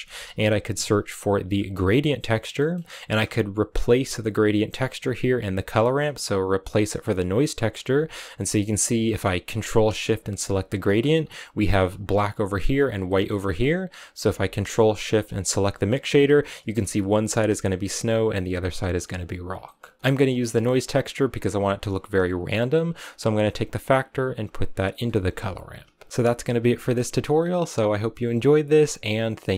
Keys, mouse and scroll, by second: 4.6 click, 8.2-10.4 middle drag, 10.4 ctrl+shift+click, 11.2-14.2 scroll down 3, 14.2-15.5 scroll up 1, 15.5 ctrl+shift+click, 16.0-17.1 scroll up 3, 17.1 scroll up 1, 19.8 middle click, 20.0 click, 21.1 click, 23.1 click.